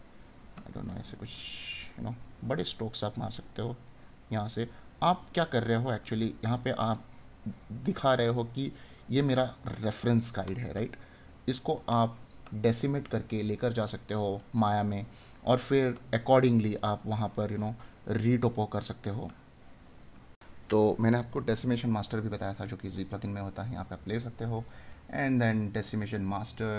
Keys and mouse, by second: 3.1 right click, 6.6 right click, 15.2 right click.